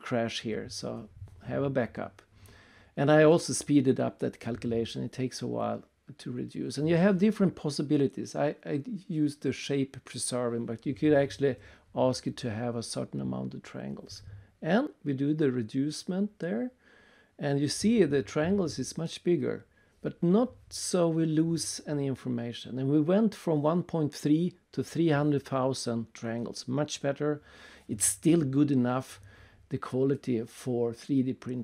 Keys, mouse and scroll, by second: 3.3 click, 3.9 click, 4.0 click, 4.5 click, 7.0 click, 7.6 click, 8.2 click, 9.9 7, 11.6 Return, 17.8 click, 23.7 click, 25.4 w, 25.8 scroll down 2, 26.9 scroll down 1, 27.4 right click, 28.7 click, 29.5 click.